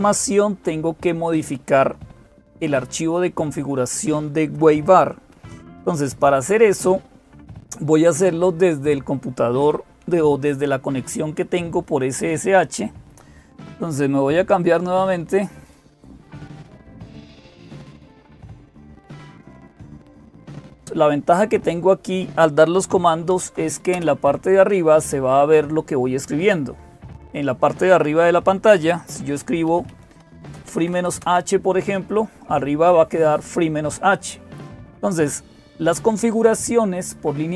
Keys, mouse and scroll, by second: 0.0-37.5 typing, 16.9 click, 19.2-20.8 drag.